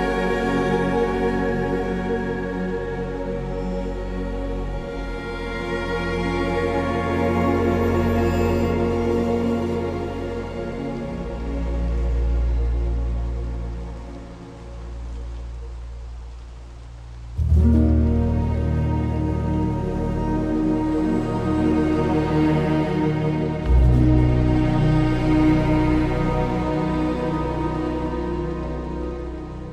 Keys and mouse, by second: 0.3-0.7 ctrl+KP_Add, 0.8 ctrl+KP_Add, 1.0 ctrl+KP_Add, 1.1 ctrl+KP_Add, 1.4 KP_7, 4.5 alt+z, 5.6 s, 5.8 x, 8.8 g, 9.0 x, 11.2 click, 11.4 alt+z, 12.5 z, 14.7 Tab, 24.2 ctrl+s.